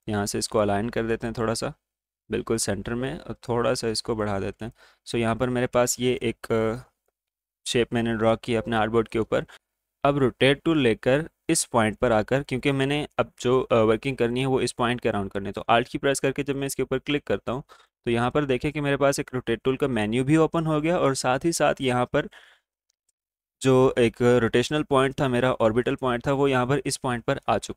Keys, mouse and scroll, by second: 4.7 space, 4.8 click, 5.2 space, 5.5-5.8 alt+scroll up 1, 5.8 space, 6.2 click, 6.7 space, 7.0 click, 9.5 click, 9.5 typing, 12.0 alt+Num_Lock, 12.0-20.8 drag, 12.0 typing, 17.3 typing.